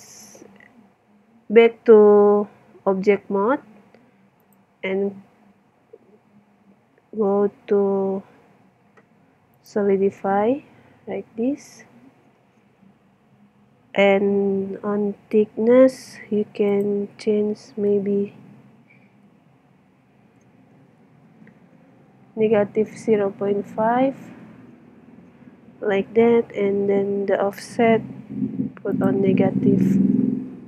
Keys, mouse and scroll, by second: 4.4-6.3 drag, 10.7-13.1 middle drag, 16.7-18.5 drag, 28.9-30.6 drag.